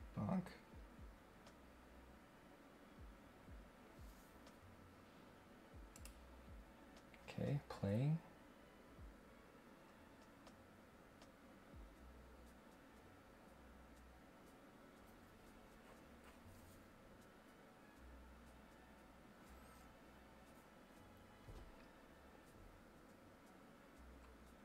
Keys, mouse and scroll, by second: 5.9 click.